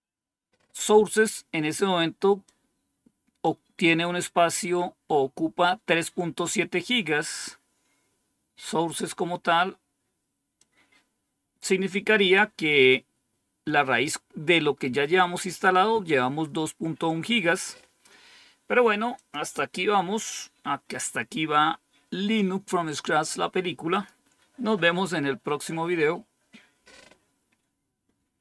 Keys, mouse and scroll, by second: 0.7-1.4 typing, 2.3-3.4 drag, 10.5-11.5 drag, 19.0 click, 23.8 click, 24.3 click.